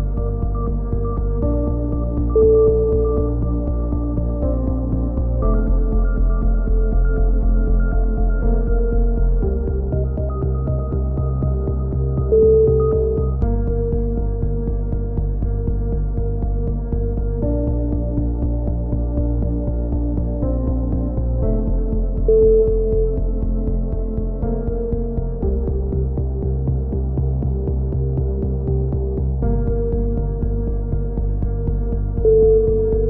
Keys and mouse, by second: 1.6 KP_7, 2.2-3.3 drag, 2.6 z, 3.5 z, 4.1 click, 6.3-7.6 right drag, 7.1 KP_7, 7.6 z, 8.0 right click, 9.2 z, 9.7-10.8 middle drag, 11.1-12.1 drag, 11.7 a, 13.3 click, 14.8 KP_3, 15.3 z, 16.0 click, 16.9 middle click, 18.8 x, 19.2-21.3 middle drag, 21.3 ctrl+r, 24.5 click, 24.8 g, 27.0 click, 27.3 a, 28.3 ctrl+r, 32.4 g.